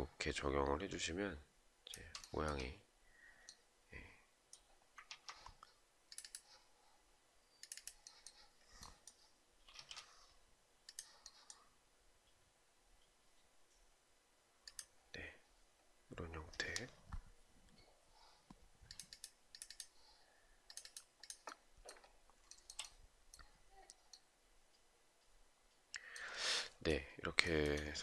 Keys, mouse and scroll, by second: 1.8 shift+right click, 9.3 space, 22.0 shift+right click, 27.0 shift+right click.